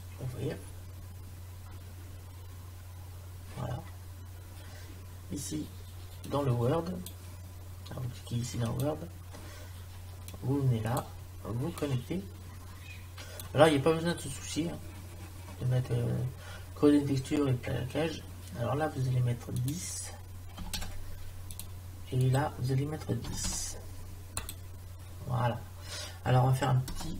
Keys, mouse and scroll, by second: 0.0-1.8 drag, 6.3-8.0 drag, 8.9 click, 19.6-21.6 drag, 22.2-23.8 drag, 27.0 KP_0.